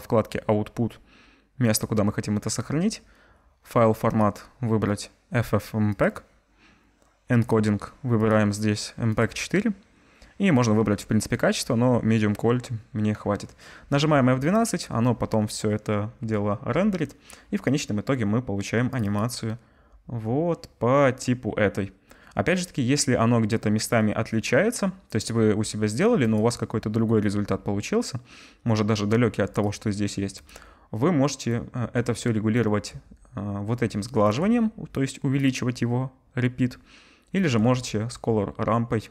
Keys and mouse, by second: 32.7-35.4 middle drag, 35.4-39.1 drag.